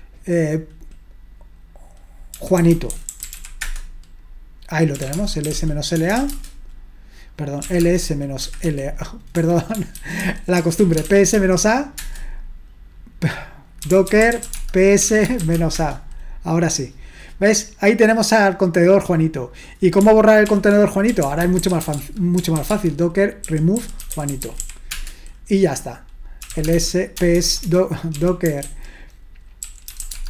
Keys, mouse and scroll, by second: 2.4-6.3 typing, 7.4-12.0 typing, 10.0 ctrl+w, 10.2 ctrl+w, 13.6-16.0 typing, 18.5-21.1 drag, 20.5 ctrl+l, 20.9-25.1 typing, 26.3-30.2 typing.